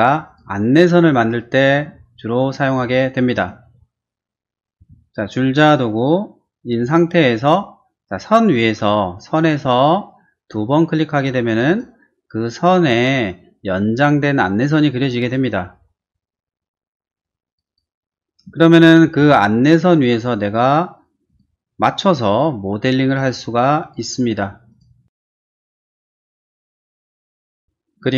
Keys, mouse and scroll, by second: 0.2 click, 1.3 middle click, 2.0 shift+middle click, 3.3 space, 4.8 t, 11.5 click, 11.7 click, 17.5 click, 17.7 click, 18.6 shift+middle click, 19.2 shift+r, 19.8 click, 21.3 click, 23.8 click, 24.7 click, 26.0 space, 27.2 ctrl+e, 27.2 click, 27.4 click, 27.6 middle click.